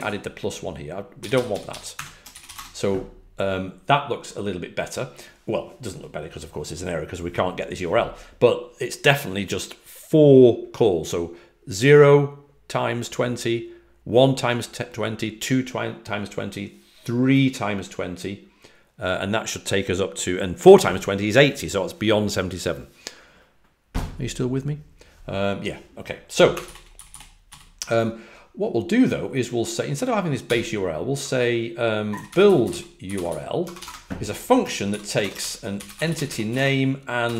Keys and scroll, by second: 0.0-2.4 typing, 26.1-27.9 typing, 30.4-34.2 typing, 35.6-37.1 typing.